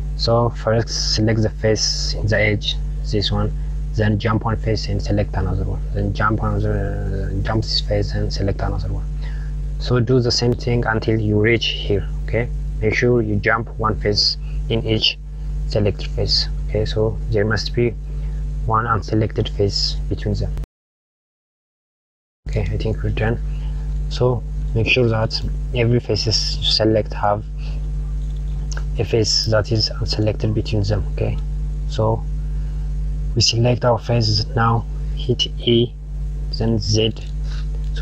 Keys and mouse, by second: 2.8 click, 5.3 shift+click, 8.7 shift+click, 20.9 shift+drag, 21.1 shift+click, 21.3 shift+drag, 21.5 shift+click, 22.2 shift+click, 22.5 shift+click, 24.1 click, 28.7 KP_Add, 30.8 click, 35.6 e.